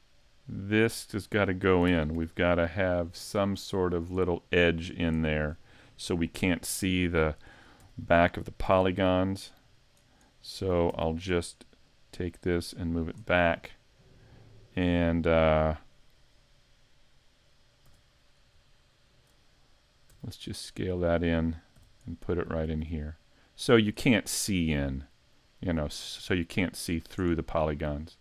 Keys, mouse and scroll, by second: 0.9 middle click, 1.9 ctrl+Tab, 2.4 right click, 4.6 middle click, 5.3 shift+middle click, 7.8 e, 8.7 s, 9.9 click, 10.9 e, 11.2 click, 12.0 click, 13.5 middle click, 16.2 KP_1, 17.9 z, 18.3-18.8 scroll up 1, 18.8 shift+middle click, 18.8 scroll up 1, 20.1 s, 21.2 click, 21.7 g, 23.8 click, 24.9 click, 26.0 click, 27.9 click.